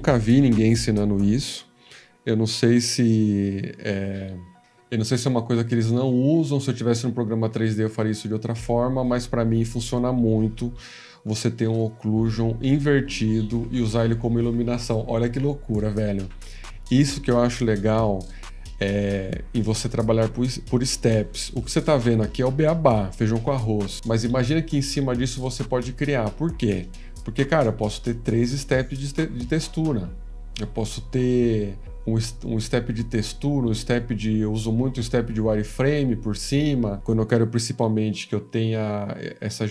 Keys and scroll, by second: 2.8 F18.